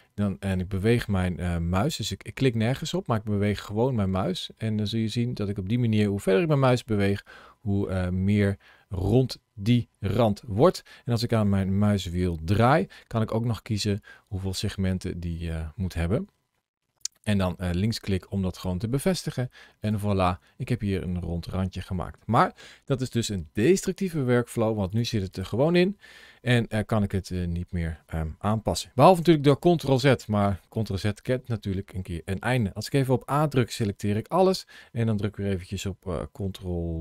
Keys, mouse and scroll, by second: 12.9-13.3 scroll down 2, 13.5-16.0 scroll up 2, 16.0-16.6 scroll down 2, 16.7 scroll up 1, 16.9 click, 19.1 middle click, 19.7 click, 20.1 middle click, 24.7 click, 25.2 click, 27.0 middle click, 28.7 ctrl+z, 29.1 ctrl+z, 30.7 middle click, 33.0 a, 34.4-36.1 scroll down 1.